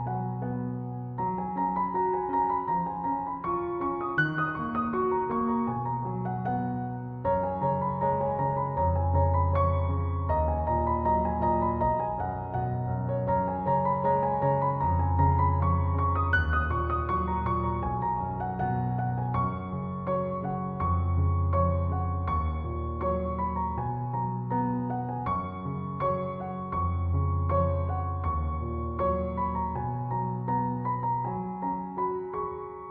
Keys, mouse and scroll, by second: 5.8 ctrl+7, 9.5 ctrl+7, 24.4 Escape.